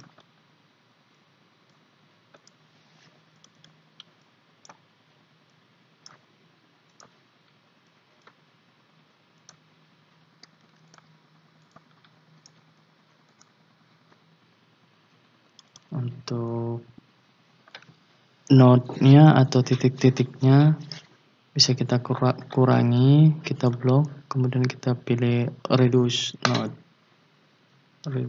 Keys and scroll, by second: 10.6 ctrl+z.